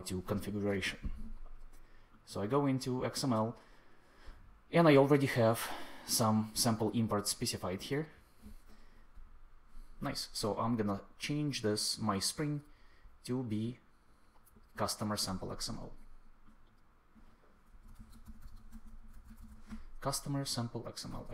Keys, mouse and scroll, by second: 17.4-19.8 typing, 21.0 super+s.